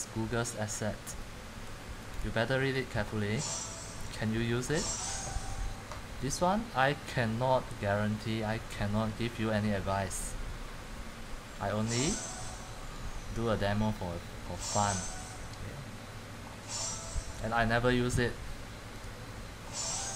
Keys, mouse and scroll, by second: 1.8-6.0 drag, 6.0-9.8 middle drag, 9.8-10.9 scroll down 2, 10.9 scroll down 1, 16.8-18.2 scroll down 1, 18.2-19.1 scroll up 2, 19.2-20.1 drag.